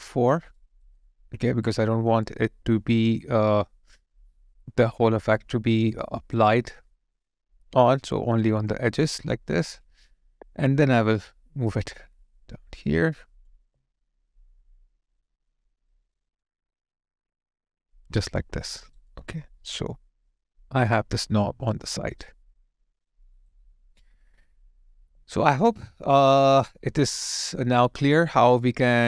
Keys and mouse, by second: 0.5 alt+right click, 1.0 alt+click, 5.3 alt+right click, 6.5 alt+click, 8.9 alt+right click, 9.1 alt+click, 14.2 alt+middle click, 14.9 alt+right click, 15.4 alt+click, 18.6 alt+click, 18.7 alt+right click, 19.1 alt+click, 21.9 alt+right click, 22.4 alt+middle click, 23.2 alt+right click, 23.7 alt+middle click, 24.2 alt+right click, 25.1 alt+click, 25.7 alt+middle click, 26.4 alt+click, 28.5 alt+right click, 28.8 alt+click.